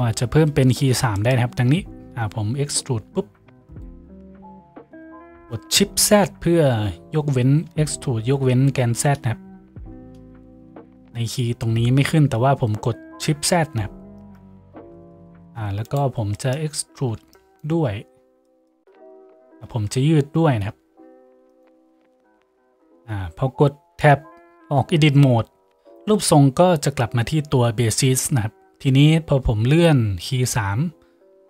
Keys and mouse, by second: 1.5 Tab, 2.9 e, 3.9 s, 4.7-7.9 middle drag, 14.5-30.3 middle drag, 16.7 z, 17.1 a, 17.3 b, 18.9 z, 20.5 g, 22.3 Tab, 30.3-31.4 drag.